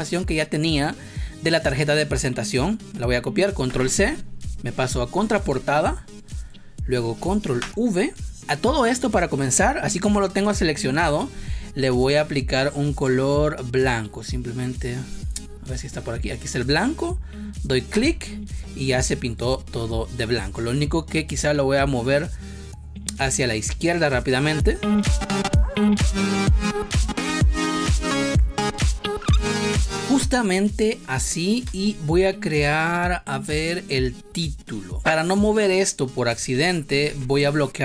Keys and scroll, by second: 3.6 ctrl+c, 5.5 space, 7.5 ctrl+v, 25.8 ctrl+z, 27.0 space, 28.2 space, 29.7 space, 31.6 space, 37.0 ctrl+z.